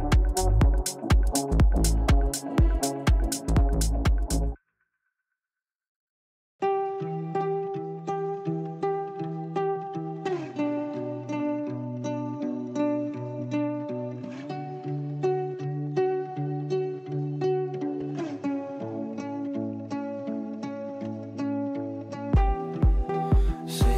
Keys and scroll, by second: 14.2 f, 16.9 shift+F2, 18.5 ctrl+z.